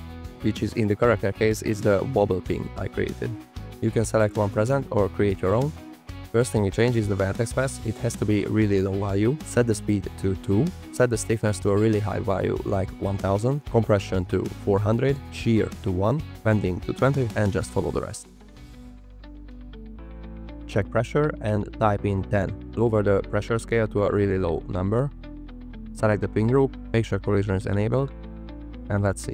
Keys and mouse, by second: 0.7-1.6 drag, 1.9 f, 2.0 click, 2.1 middle click, 2.9 click, 5.0-5.9 drag, 7.1 click, 7.8-9.2 drag, 10.0 click, 10.9-15.7 drag, 11.4 KP_0, 11.6 KP_0, 14.9 KP_0, 16.1 click, 17.5 click, 18.5 click, 19.1 click, 19.6 click, 21.0 click, 21.6 click, 22.6-24.2 drag, 25.8 click, 29.0 click.